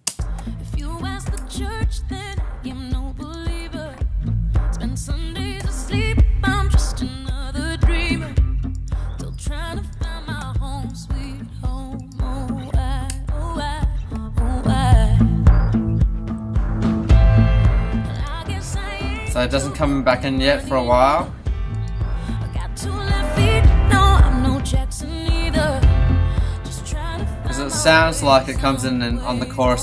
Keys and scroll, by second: 0.0 space, 1.3 BackSpace, 2.6 BackSpace, 9.3 BackSpace, 10.4 BackSpace, 13.1 BackSpace, 18.5 BackSpace, 21.5 BackSpace, 22.4 BackSpace, 27.0 BackSpace.